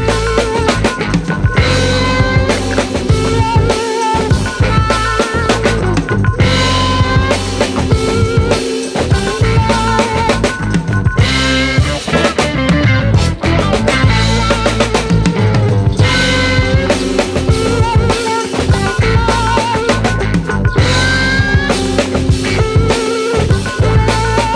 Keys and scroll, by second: 23.2 ctrl+space.